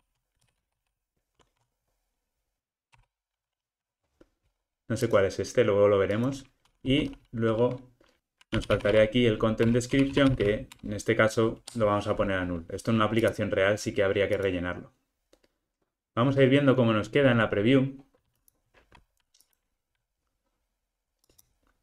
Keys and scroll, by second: 3.0 Return, 9.8 Return.